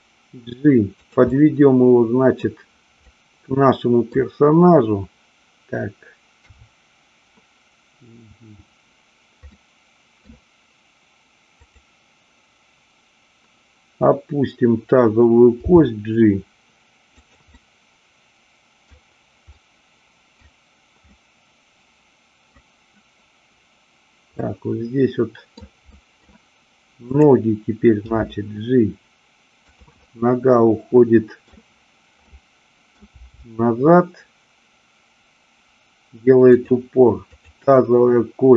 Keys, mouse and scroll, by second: 1.1 click, 1.3-2.3 middle drag, 3.1-4.2 scroll up 1, 6.3 KP_3, 9.6 middle click, 15.6 g, 17.2 click, 17.7 scroll up 1, 17.7-18.9 middle drag, 19.6-20.3 middle drag, 21.1-22.5 scroll up 1, 24.3-25.6 middle drag, 25.8-26.3 middle drag, 26.9-28.2 drag, 28.2 g, 29.9-30.7 scroll up 1, 30.7-31.6 middle drag, 32.2-32.9 middle drag, 33.1 g, 37.3 click.